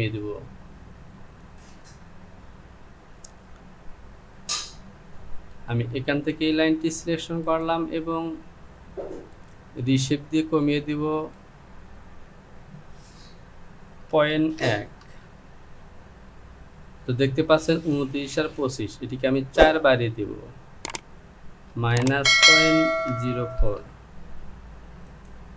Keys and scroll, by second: 13.1 Down, 14.1 KP_Decimal, 14.6 KP_1, 20.3 Down.